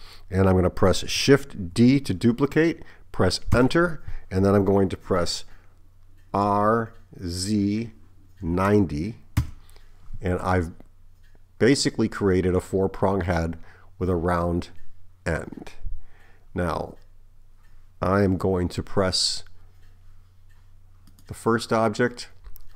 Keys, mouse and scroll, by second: 1.8 shift+d, 6.5 r, 21.1 click.